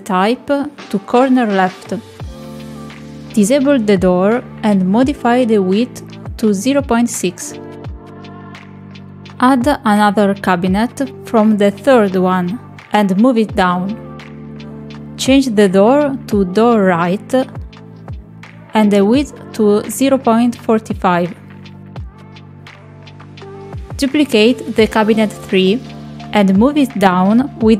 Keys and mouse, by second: 0.6-2.7 drag, 3.7 click, 6.6 click, 8.2-10.4 drag, 12.0 click, 14.0 click, 16.2 click, 17.1 middle click, 18.2 click, 20.2 click, 22.1-23.4 drag, 24.9 click.